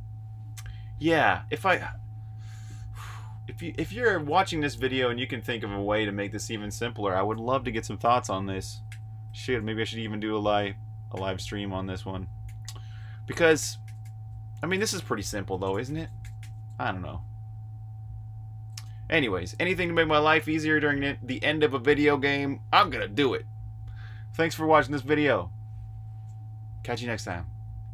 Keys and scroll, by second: 7.7-9.2 typing, 11.0 j, 12.4-13.9 typing, 15.3 typing, 18.7 Escape.